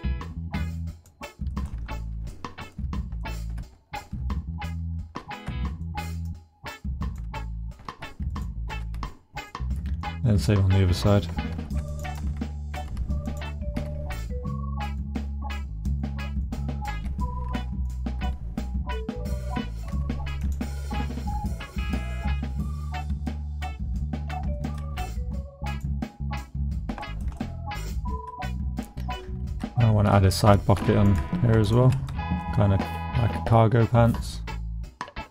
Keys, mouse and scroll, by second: 0.9 middle click, 1.5 shift+middle click, 2.3 shift+middle click, 3.2 shift+click, 3.3 shift+middle click, 5.2 ctrl+r, 6.2 click, 6.9 middle click, 7.8 s, 8.3 middle click, 8.7 g, 9.4 middle click, 10.0 click, 10.1 middle click, 10.5 click, 11.5 ctrl+r, 12.1 click, 12.7 s, 13.3 click, 13.8 g, 14.9 click, 15.3 click, 16.0 click, 16.9 g, 17.9 click, 18.1 s, 19.2 click, 19.9 g, 20.4 click, 21.0 shift+click, 21.5 click, 22.3 middle click, 22.6 shift+middle click, 23.2 middle click, 24.5 shift+middle click, 26.2 middle click, 27.0 shift+middle click, 27.4 middle click, 28.0 shift+middle click, 28.8 middle click, 31.1 middle click, 31.6 shift+middle click, 32.1 middle click, 32.6 middle click, 34.1 middle click.